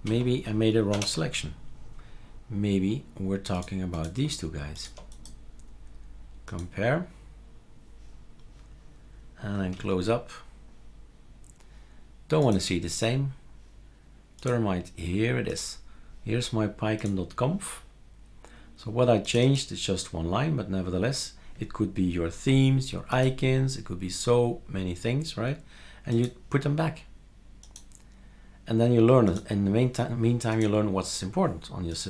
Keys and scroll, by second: 0.0 super+q, 0.9 shift+super+Return, 9.7 super+q.